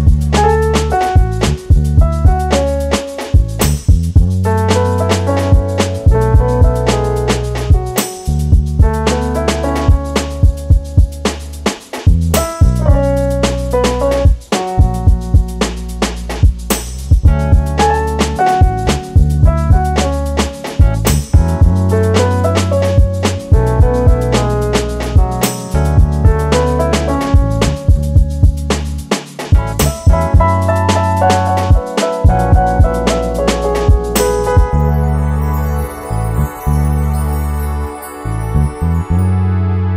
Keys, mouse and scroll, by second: 3.9 click, 4.8 click, 5.0 click, 6.7 click, 7.3 click, 8.3 click, 8.8 Delete, 9.3 click, 10.0-10.3 scroll down 2, 11.0 ctrl+shift+t, 27.2-27.9 scroll up 4, 27.9-28.6 scroll down 8, 28.3 middle click, 30.4-30.9 scroll up 5, 31.0-32.0 scroll down 2, 32.0 click, 32.0 scroll down 3, 33.3 click, 33.9 click.